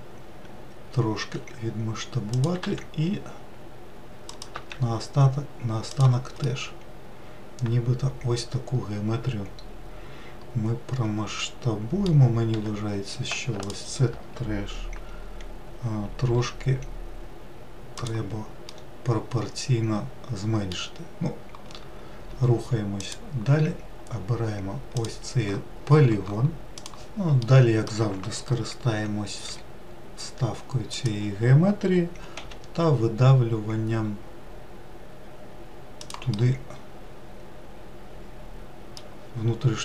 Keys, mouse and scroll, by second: 1.7 s, 2.9 e, 4.8 s, 6.8-9.7 middle drag, 12.9 2, 13.9 alt+click, 16.6 s, 19.0-22.1 middle drag, 23.3-25.3 drag, 27.8-29.8 middle drag, 29.8 i, 32.7 e, 36.6-39.7 middle drag.